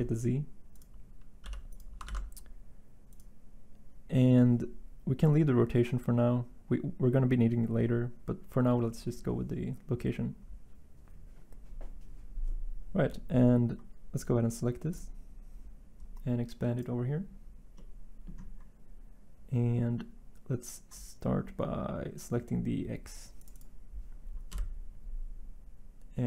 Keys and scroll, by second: 1.4 g, 2.0 shift+d, 24.5 Delete.